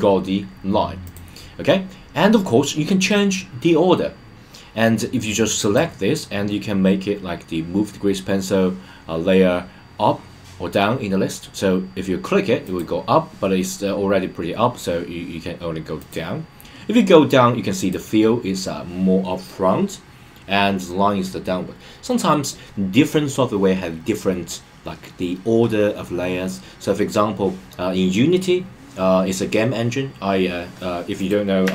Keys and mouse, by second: 1.0 click, 5.6 click, 12.6 click, 15.9 click, 17.7 click, 31.1 click.